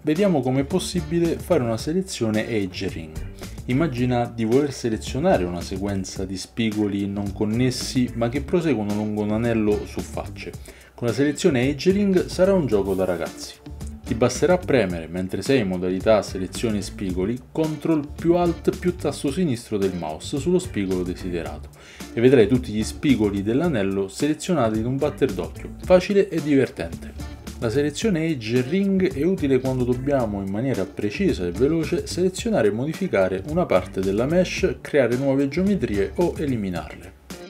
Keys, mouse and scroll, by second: 19.1-22.2 drag, 29.3 ctrl+alt+click, 30.6 ctrl+alt+click, 34.6 ctrl+alt+shift+click.